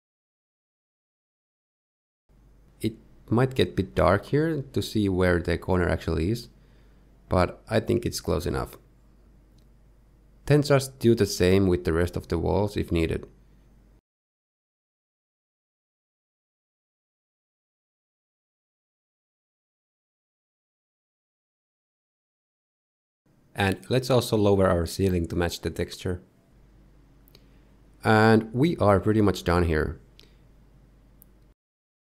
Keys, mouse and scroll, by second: 2.5-3.0 scroll down 3, 3.8 Tab, 4.5-5.6 scroll down 2, 5.6 click, 6.1-6.4 scroll up 1, 6.8 g, 11.0 g, 12.4 middle click, 12.6 scroll down 2, 12.7 middle click, 12.9 scroll up 2, 13.0 middle click, 13.1 Tab, 13.2 click, 13.3 Tab, 13.3 middle click, 13.4 click, 13.5 middle click, 13.5 shift+middle click, 13.5 scroll up 3, 13.7 shift+middle click, 13.8 shift+g, 14.3 scroll down 3, 14.3 middle click, 14.4 click, 14.5 shift+middle click, 14.6-15.2 scroll up 2, 14.6 g, 15.2 scroll down 1, 15.3 scroll down 1, 15.3 shift+middle click, 15.5 click, 15.5 middle click, 15.5 g, 21.4-22.6 scroll down 4, 22.6 scroll down 3, 22.8 shift+middle click, 23.8 middle click, 24.4 click, 24.7 middle click, 25.2-25.7 scroll up 2, 25.7 g, 30.3 middle click, 31.6 middle click, 32.1 scroll up 3.